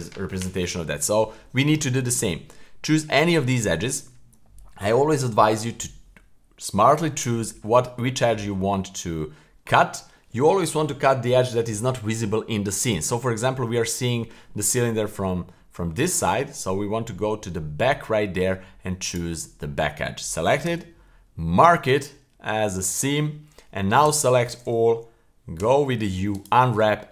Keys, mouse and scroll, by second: 2.3-2.6 scroll up 2, 2.6 middle click, 4.2-4.8 scroll down 2, 7.2 right click, 8.0-8.4 middle drag, 8.7-9.4 middle drag, 9.6-12.8 middle drag, 13.5-14.3 middle drag, 14.6-15.2 middle drag, 15.2-15.9 scroll down 3, 15.9-17.0 scroll up 3, 17.0-18.4 middle drag, 19.1 right click, 19.5-20.1 scroll up 1, 20.6 w, 23.5 scroll up 1, 24.0 a, 25.6 u.